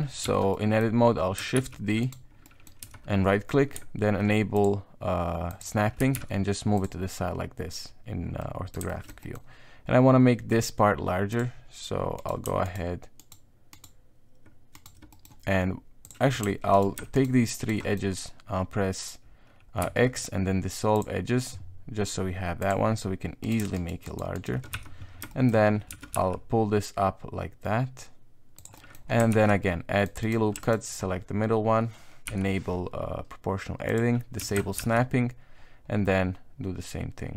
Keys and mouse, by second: 0.2 a, 0.5 middle click, 1.5 shift+d, 2.4 middle click, 2.8 KP_1, 4.5 click, 5.5 click, 6.0 g, 8.4 middle click, 8.9 shift+middle click, 9.2 middle click, 11.3 click, 12.2 right click, 12.6 shift+right click, 13.2 shift+right click, 13.8 shift+right click, 14.7 shift+right click, 15.1 middle click, 16.0 click, 16.7 alt+right click, 17.1 alt+shift+right click, 17.6 alt+shift+right click, 17.8 middle click, 19.8 x, 22.6 click, 23.4 right click, 23.7 shift+right click, 24.0 shift+right click, 24.3 shift+right click, 24.7 KP_1, 25.3 shift+middle click, 25.9 g, 28.7 middle click, 29.3 ctrl+r, 30.6 alt+right click, 32.2 o, 33.9 click, 34.4 s.